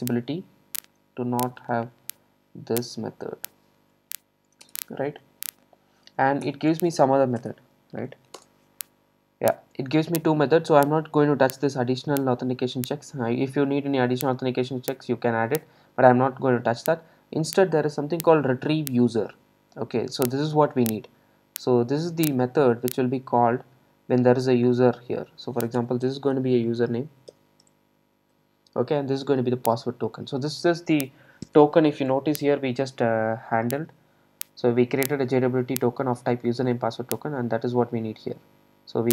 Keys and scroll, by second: 6.5 alt+Return, 15.7 ctrl+shift+super+F12.